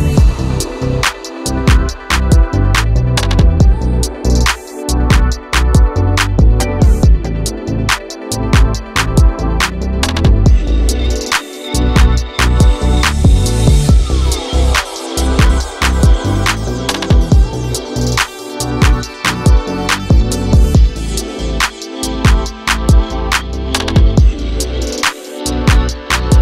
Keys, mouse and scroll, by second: 0.4 s, 1.3 Tab, 1.8 alt+z, 2.2 click, 2.4 middle click, 2.9 scroll down 2, 3.1-3.4 drag, 3.4 middle click, 3.7 Tab, 4.0 3, 4.1 click, 4.7 middle click, 5.1-5.4 scroll up 6, 5.4 shift+middle click, 5.7 shift+click, 6.0 scroll down 1, 6.1 middle click, 6.8 i, 8.3 middle click, 9.1 x, 10.1 middle click, 10.8 click, 11.1 middle click, 11.5 Tab, 11.8 click, 12.4 Tab, 12.5 3, 12.7 click, 13.1 middle click, 13.7 shift+click, 14.2 i, 15.0 middle click, 15.3 x, 16.1 Tab, 16.4 click, 16.7-18.3 middle drag, 18.7 click, 18.9 scroll up 1, 19.0 q, 20.9 shift+click, 21.2 shift+click, 22.0-23.5 drag, 23.5 Tab, 23.8 ctrl+a, 24.0 Tab, 24.4 click, 24.7 ctrl+a, 25.6 click, 25.7 ctrl+a.